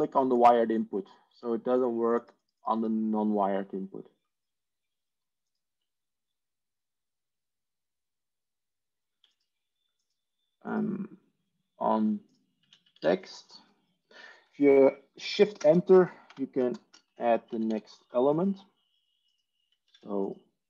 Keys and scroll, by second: 9.9 Tab, 12.9 Tab, 15.5 shift+Return, 16.1-17.6 typing, 16.7 shift+Return, 19.7 Tab, 20.1 Tab.